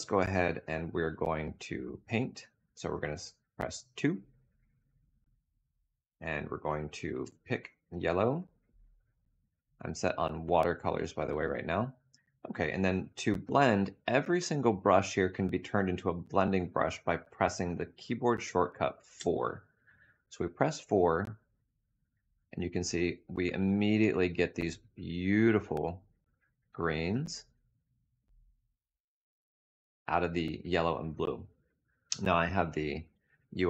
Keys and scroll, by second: 2.8 2, 18.8 4, 32.7 Tab.